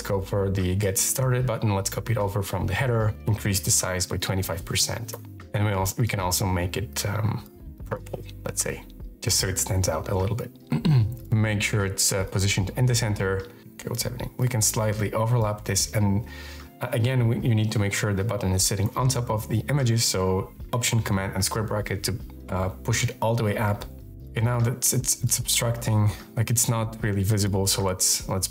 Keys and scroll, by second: 3.0 Right, 3.1-4.6 typing, 4.9 Return, 14.2 shift+space, 18.6 alt+super+].